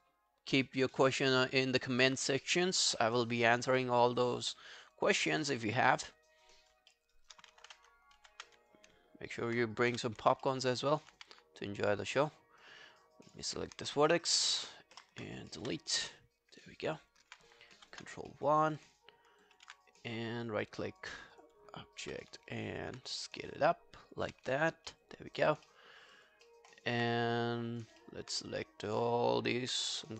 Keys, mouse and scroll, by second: 0.1 scroll down 1, 1.1-2.1 scroll down 14, 2.1-2.6 scroll down 1, 3.0 alt+middle click, 3.3 alt+right click, 3.5 alt+click, 3.8 alt+middle click, 4.0 alt+right click, 4.3 alt+click, 4.5 alt+middle click, 4.7 alt+right click, 5.0 alt+click, 5.7 right click, 6.9 alt+middle click, 7.2 alt+right click, 8.7 alt+click, 9.9 f, 10.5 alt+middle click, 10.7 alt+right click, 10.9 alt+click, 11.2 q, 11.4 right click, 15.0 ctrl+F11, 15.6 ctrl+F1, 16.9 alt+scroll down 1, 17.1 alt+click, 17.8 ctrl+i, 18.1-18.7 ctrl+scroll down 3, 18.3 alt+middle click, 18.8 alt+click, 19.2 alt+scroll up 2, 19.5 alt+click, 19.9 right click, 22.1 r, 22.5 alt+click, 24.6 alt+click, 24.9 alt+middle click, 25.2 alt+scroll down 2, 25.4 alt+click, 25.7 alt+middle click, 26.0 alt+scroll up 3, 26.2 alt+click, 26.5 alt+middle click, 26.6 alt+scroll down 1, 26.7 alt+right click, 27.1 right click, 28.0 alt+middle click, 29.2 alt+click, 29.9 r.